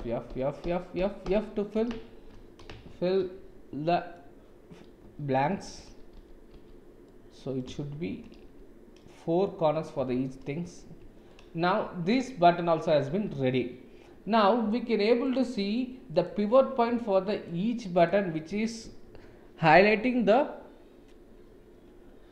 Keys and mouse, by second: 0.0-2.7 typing, 3.1-4.1 middle drag, 5.0 f, 5.5 f, 6.1 f, 6.5 f, 7.0 middle click, 7.7 shift+z, 8.4 f, 9.0 click, 10.1 shift+z, 10.9 Tab, 11.2-12.3 middle drag, 13.1 ctrl+s, 15.3 click, 16.1 click, 17.4 click, 17.9 click.